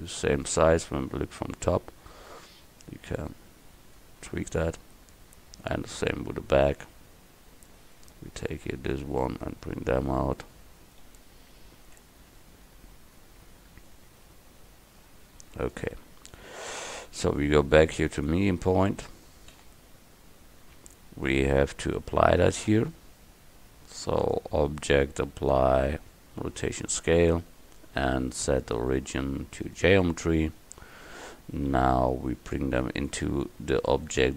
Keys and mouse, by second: 1.2 KP_7, 7.8-9.0 right drag, 9.6-10.7 drag, 11.1 KP_7, 13.9-15.8 middle drag, 15.8 click, 18.3 click, 19.6 a, 20.7 Tab, 28.6-31.8 drag, 31.8 KP_1, 32.6-34.3 drag.